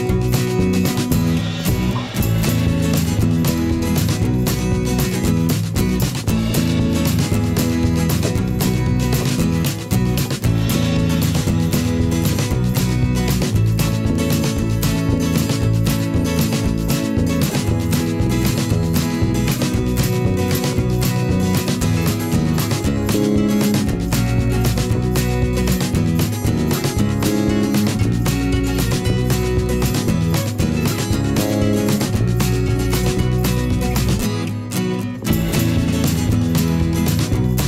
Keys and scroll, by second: 5.5 ctrl+a, 9.8 ctrl+a, 22.9 ctrl+t, 26.3 Return, 27.0 Up, 27.8 Down, 31.0 Up, 32.4 Down, 32.5 Up.